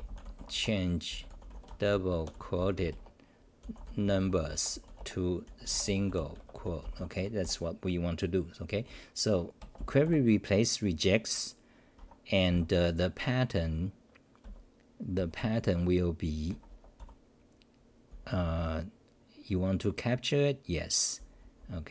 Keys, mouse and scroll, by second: 0.0-0.2 typing, 7.2 Home, 12.0 Home, 12.5 Up, 14.4 v, 15.2 n, 16.2-18.5 typing, 21.2 n.